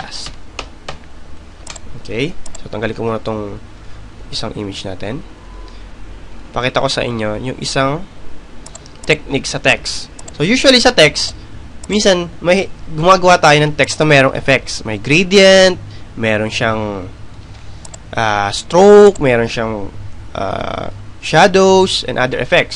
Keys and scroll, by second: 2.1 End, 3.6-5.7 typing, 6.0 Return, 22.4 Return.